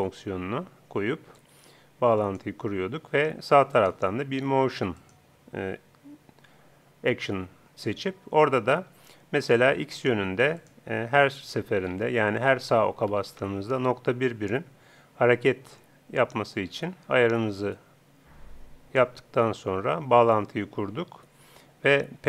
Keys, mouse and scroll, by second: 1.3-3.1 drag, 3.7-5.5 drag, 10.6-12.3 drag, 15.8-17.5 drag.